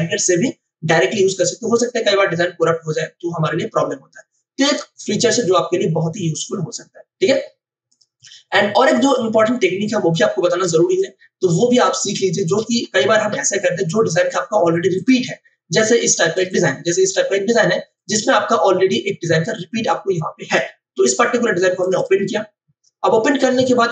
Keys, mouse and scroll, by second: 7.8 click, 10.7 space, 10.9 click, 12.1 space, 12.9 space, 13.1 ctrl+o, 14.9 click, 21.8 click.